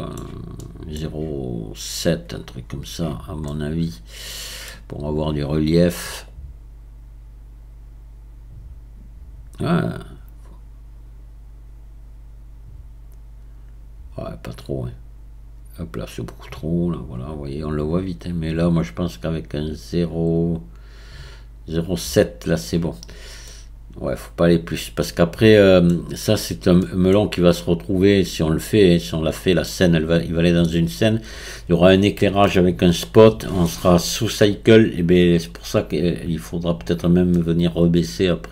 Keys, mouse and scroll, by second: 7.6-9.7 drag, 17.5-23.1 drag, 23.1-23.5 scroll down 4, 23.5-26.3 middle drag, 26.3-26.8 scroll up 1, 26.8-27.4 middle drag, 27.4-28.5 scroll down 2, 28.5 scroll up 2, 28.7-38.5 middle drag.